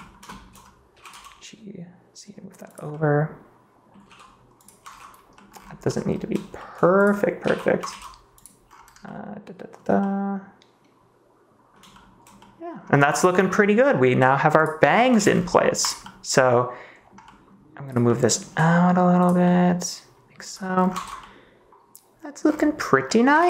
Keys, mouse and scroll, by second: 0.2 shift+middle click, 0.3 shift+click, 0.9 g, 1.0 x, 2.6 click, 2.8-3.9 middle drag, 4.0 g, 4.5 click, 4.8 ctrl+s, 13.4 middle click, 14.0 g, 14.5 click, 14.8 middle click, 15.1 ctrl+s, 15.4 middle click, 15.9-17.0 middle drag, 17.2 middle click, 18.0 middle click, 18.4 g, 19.4 middle click, 20.9 ctrl+s, 21.1-22.3 middle drag, 23.0 middle click, 23.3 ctrl+s.